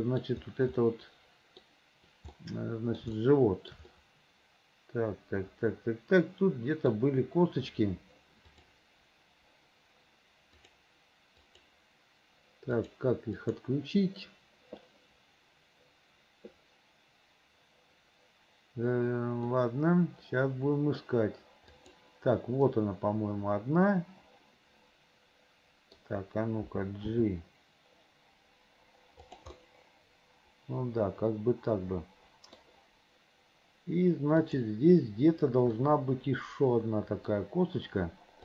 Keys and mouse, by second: 0.1 middle click, 1.1 middle click, 2.7 middle click, 3.4 shift+middle click, 4.1-7.0 middle drag, 8.6 click, 11.7 click, 12.9 click, 13.6 click, 19.7-21.1 middle drag, 21.9 middle click, 22.8-26.1 middle drag, 27.2 g, 29.9-32.7 middle drag, 34.6 click, 35.9-37.4 middle drag.